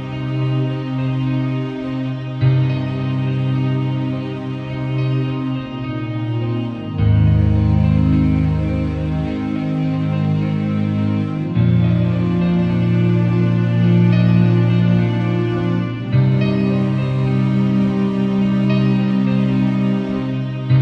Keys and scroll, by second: 1.7 Return, 3.0 super+0, 3.8 z, 5.8 v, 7.5 b, 8.5 [, 9.1 ], 14.5 v, 18.6 i, 20.1 b.